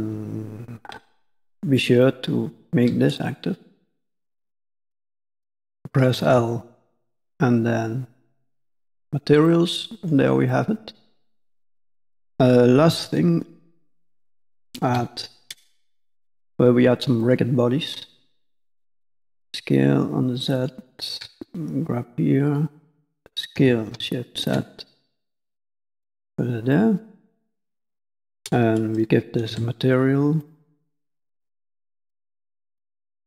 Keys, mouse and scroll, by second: 1.4 shift+click, 1.9 shift+click, 3.1 middle click, 6.5 ctrl+l, 9.4 middle click, 10.2-11.3 scroll down 2, 10.4 middle click, 11.3 KP_5, 11.6 KP_1, 12.2 scroll down 1, 13.0 shift+middle click, 14.9 shift+a, 18.3 s, 21.1 g, 23.5 s, 26.7 middle click, 27.4 scroll down 2, 27.6 middle click, 28.2 click, 29.4 alt+m, 31.0 middle click, 31.5-31.8 scroll up 2, 32.2 shift+middle click, 33.0 middle click.